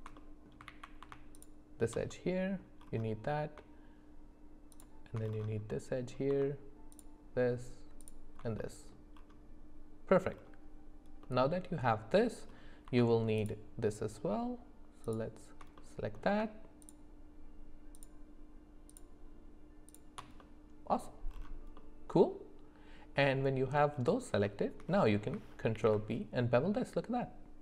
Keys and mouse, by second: 0.2 middle click, 0.7 ctrl+z, 1.4 alt+shift+click, 2.1 middle click, 4.7 alt+shift+click, 5.7 middle click, 6.9 alt+shift+click, 8.0 alt+shift+click, 8.6 middle click, 11.2 middle click, 15.0 alt+shift+click, 15.8 middle click, 16.8 alt+shift+click, 18.9 alt+shift+click, 19.9 alt+shift+click, 20.4 middle click, 21.8-23.7 middle drag, 24.5 shift+middle click, 25.7 ctrl+b.